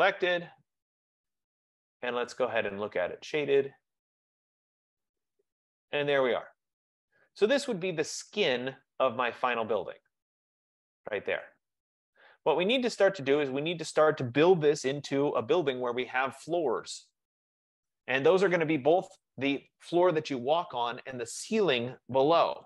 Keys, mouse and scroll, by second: 0.0-0.1 typing, 1.7-3.5 drag, 4.7 click, 4.9 click, 6.0 click, 8.8-9.5 scroll, 12.5-13.8 middle drag, 13.8-19.0 right drag.